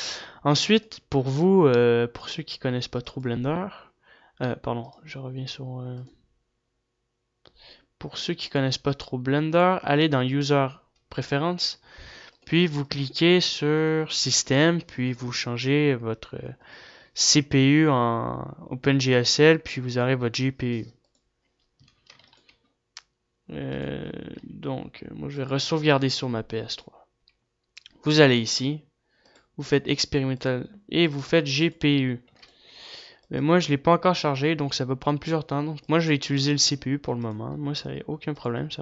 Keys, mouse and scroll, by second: 0.4 ctrl+s, 0.4 a.